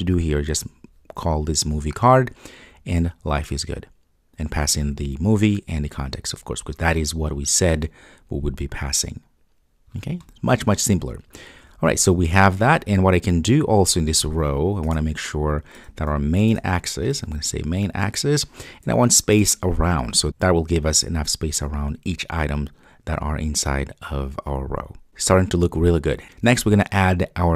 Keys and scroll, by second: 12.5 super+s, 17.5 Return, 20.2 super+s.